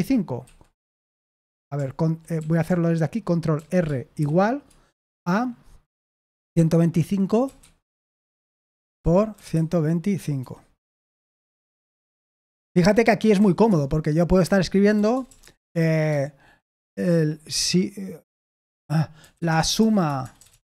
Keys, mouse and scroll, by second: 0.4 Escape, 2.3 i, 3.5 ctrl+r, 4.2 =, 5.8-11.1 typing, 11.5 Return, 12.5 Escape, 13.3 typing, 14.9 BackSpace, 15.1 BackSpace, 15.2 BackSpace, 15.4 BackSpace, 18.9-20.6 typing.